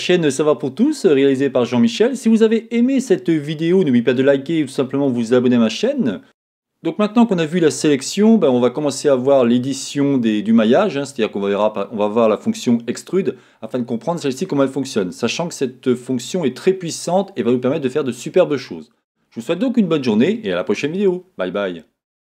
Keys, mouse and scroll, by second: 1.7-22.3 middle drag.